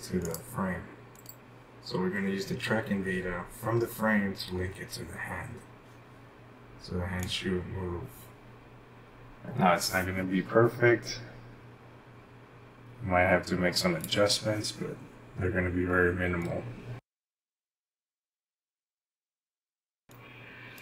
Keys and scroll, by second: 16.1-16.9 typing.